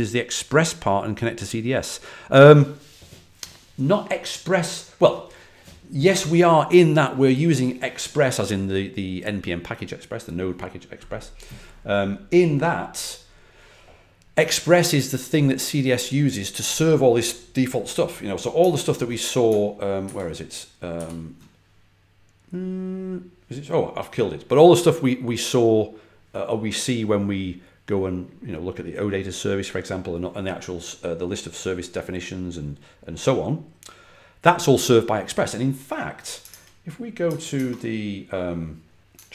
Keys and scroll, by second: 16.4 typing, 19.9 super+`, 20.8 super+w, 36.4 super+Tab, 37.1 super+Tab, 37.4 super+Tab.